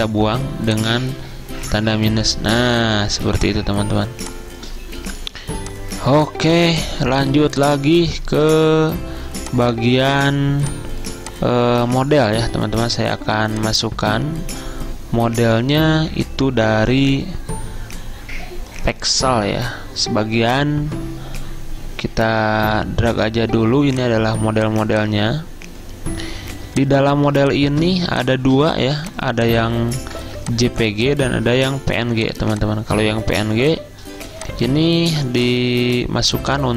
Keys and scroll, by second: 2.7-3.6 typing, 5.1 typing, 6.2 z, 8.1-8.9 typing, 27.4 z, 28.9 v, 30.3 ctrl+z, 33.6 z, 35.1 v.